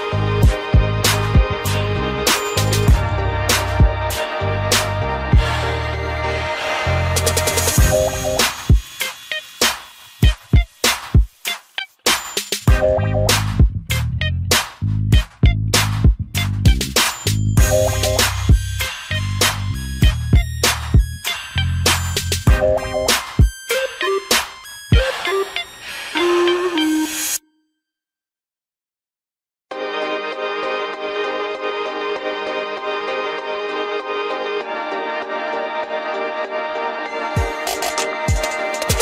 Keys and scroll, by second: 1.4 ctrl+g, 2.4 ctrl+alt+shift+e, 15.5 ctrl+g, 16.3 ctrl+alt+shift+e, 17.4 ctrl+0.